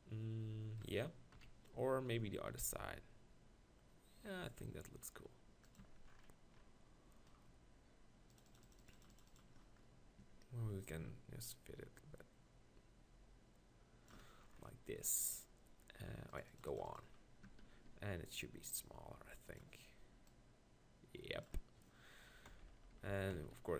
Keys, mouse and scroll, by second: 1.4 KP_1, 1.8 Tab, 2.1-4.5 middle drag, 2.5 r, 5.8 click, 5.8 Tab, 10.2 Tab, 17.5 Tab, 17.9 s, 19.1 click, 19.6 click, 22.5-23.3 KP_4.